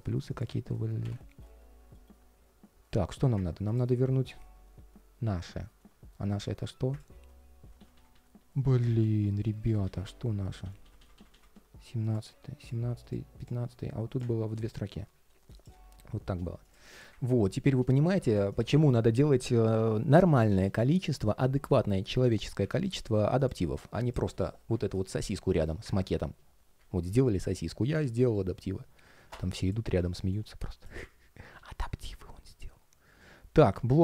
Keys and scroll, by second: 1.0 ctrl+shift+3, 1.7 ctrl+shift+3, 7.3 super+z, 10.3 shift+super+z, 27.9 super+z.